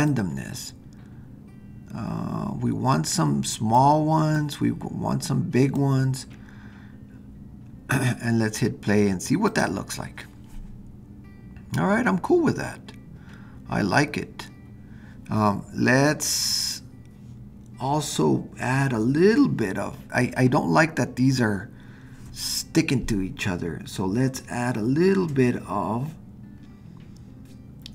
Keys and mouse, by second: 0.0-3.8 drag, 4.4-5.8 drag, 9.5 click.